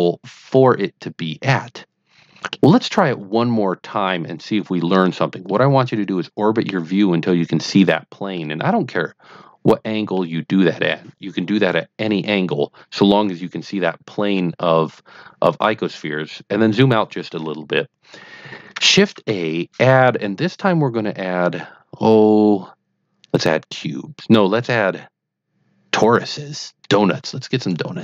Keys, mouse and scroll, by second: 0.5-2.6 middle drag, 5.4-6.7 middle drag, 7.7-8.3 middle drag, 8.6-10.1 middle drag, 15.1-15.8 scroll down 2, 19.1 shift+a, 27.4 click.